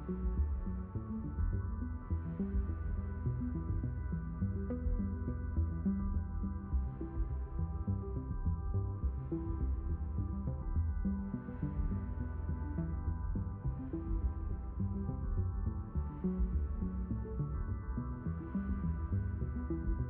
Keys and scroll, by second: 13.1 d, 17.1 s, 18.8 s.